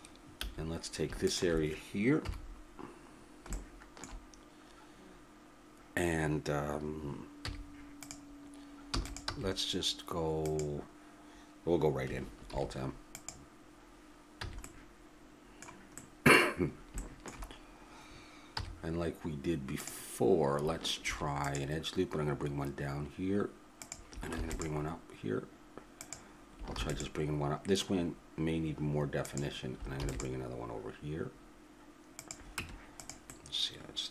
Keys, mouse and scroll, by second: 0.4 a, 1.3-2.4 drag, 2.2 KP_7, 3.1 middle click, 7.4 z, 8.9 e, 9.3 s, 12.5 alt+m, 14.4 a, 18.6 z, 21.0 ctrl+r, 24.4 ctrl+r, 26.7 ctrl+r, 30.0 ctrl+r, 32.6 Tab.